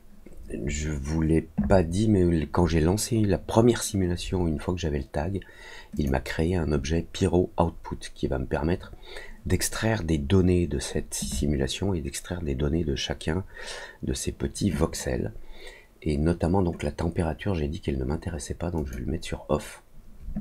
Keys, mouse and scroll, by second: 5.9 click, 18.7 click.